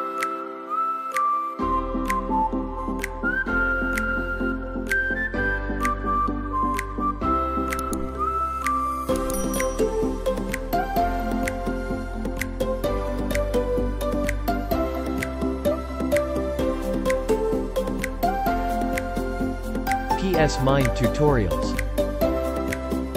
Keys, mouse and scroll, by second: 0.2 space, 0.5 space, 1.3 click, 2.5 click, 3.5-4.7 typing, 3.7 click, 4.4 click, 6.1 click, 6.2 click, 6.5 typing, 12.2 click, 13.0 space, 14.4-18.8 drag, 22.2 click, 22.3 click, 22.7 click.